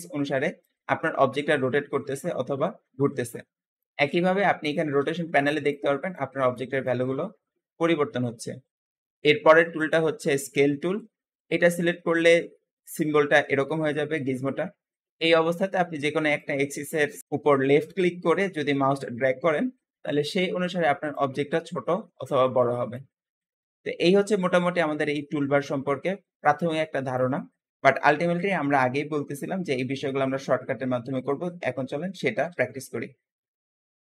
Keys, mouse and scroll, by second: 0.5 click, 9.6-12.7 drag, 16.2 click, 21.0 click, 23.1 scroll down 2, 25.9-27.7 drag, 27.7-28.2 scroll up 1, 28.2-29.8 scroll down 1, 29.8-30.2 scroll up 2, 31.7 alt+g, 32.4 alt+s, 32.9-33.6 scroll down 1, 33.6 scroll down 1.